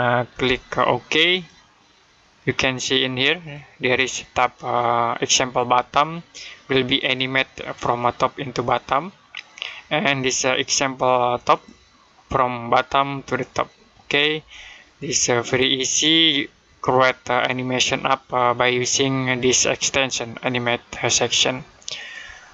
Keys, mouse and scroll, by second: 0.2 a, 1.2 click, 6.8 click, 11.3 click, 15.3 click, 19.4 click, 21.8 click.